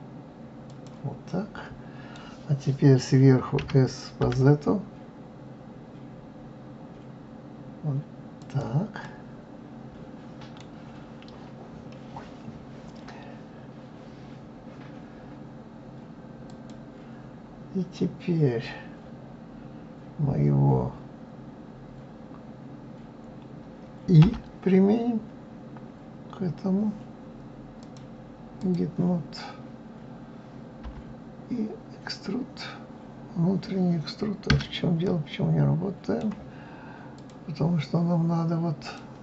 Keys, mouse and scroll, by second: 1.3-3.6 middle drag, 3.6 s, 9.0-12.0 middle drag, 16.4 click, 17.6-18.3 scroll up 2, 18.3-21.3 scroll up 1, 24.2 i, 27.8-30.8 drag, 35.0-37.1 middle drag, 37.1 click, 38.8-39.2 drag.